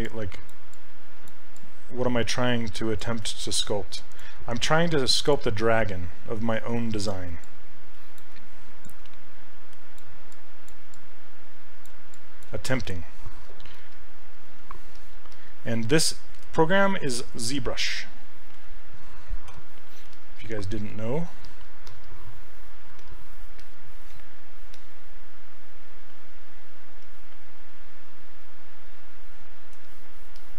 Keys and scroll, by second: 19.5 q, 20.1 s.